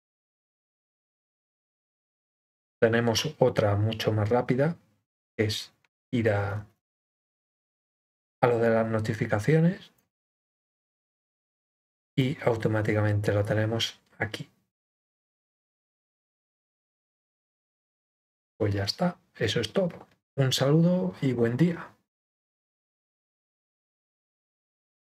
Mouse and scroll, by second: 7.9-9.9 drag, 12.1-17.1 drag.